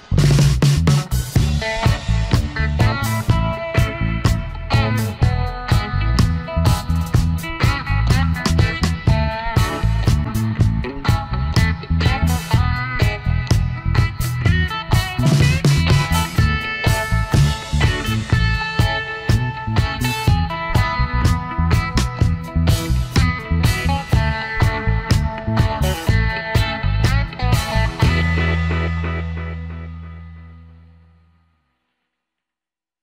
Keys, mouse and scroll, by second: 3.8-6.3 alt+scroll down 1, 9.6 alt+scroll down 1, 9.7 space, 10.2 alt+scroll up 1, 10.8 space, 15.8 alt+scroll down 1, 16.0 space, 17.5 alt+scroll up 1, 17.8 shift+click, 20.0 space, 24.2 space, 26.2 space, 27.1 shift+click, 30.9 ctrl+shift+a.